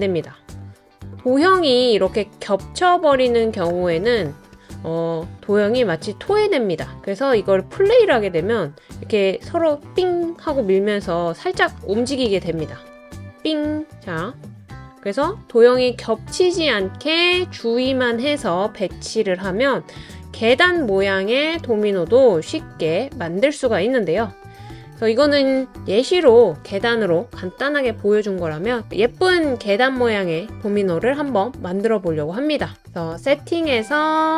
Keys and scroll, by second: 26.1 BackSpace.